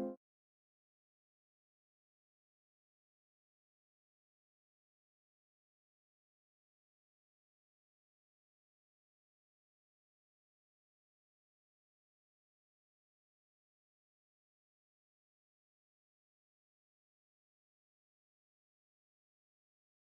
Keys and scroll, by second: 16.0 ctrl+c, 16.2 ctrl+v.